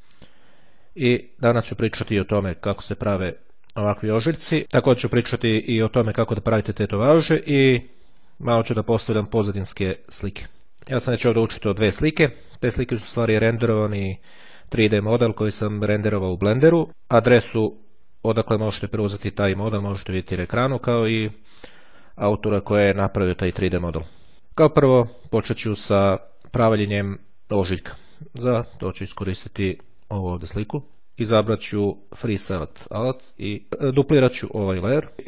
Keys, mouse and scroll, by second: 1.1-1.6 scroll down 1, 4.3 scroll down 2, 10.6 click, 15.2-21.1 drag, 22.1-24.8 drag, 27.7 click, 29.0 click, 32.6-33.7 drag, 35.0 click.